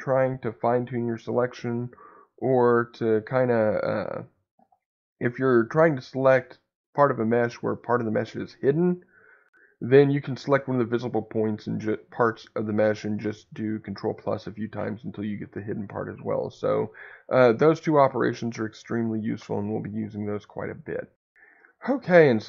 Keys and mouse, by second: 1.3 middle click.